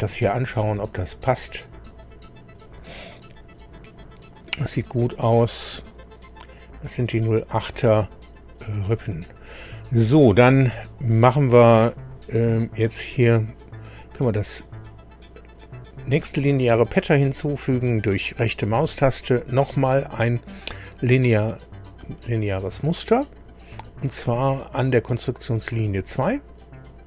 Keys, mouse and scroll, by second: 0.2-0.7 scroll up 2, 0.8-1.2 scroll up 2, 1.7 scroll down 2, 2.5-3.2 scroll up 2, 3.4-3.7 scroll up 2, 5.4-6.0 scroll up 2, 7.2-8.0 scroll down 4, 8.4 scroll down 1, 16.1 right click, 22.0 click, 24.1 click, 25.6 click.